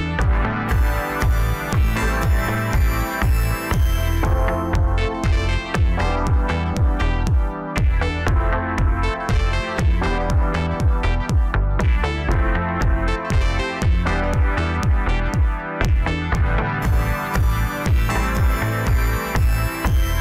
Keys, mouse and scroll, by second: 0.3-1.4 middle drag, 1.4 KP_1, 2.0-3.3 scroll down 1, 3.3 click, 4.9-8.0 drag, 8.3 KP_7, 9.1 s, 15.1 KP_3, 16.0 scroll up 2, 16.8 s.